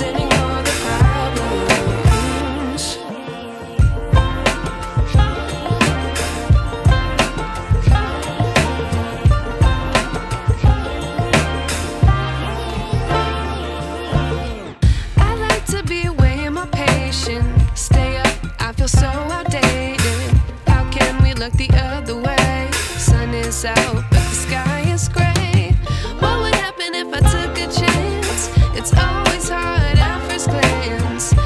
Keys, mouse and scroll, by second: 7.6 click, 8.8-10.1 alt+drag, 10.5-12.4 alt+drag, 12.3 space, 12.5-13.1 ctrl+click, 13.6-14.9 drag, 15.2-15.8 click, 15.7 space, 16.2-16.5 alt+click, 17.1 ctrl+t, 18.1 space, 18.3-19.4 alt+click, 22.0 ctrl+t, 23.9-25.3 click, 25.7 space, 26.0-27.2 ctrl+drag, 28.2-29.1 alt+drag, 29.6 ctrl+h, 30.2 ctrl+space, 30.4 ctrl+click, 30.7-31.3 ctrl+space.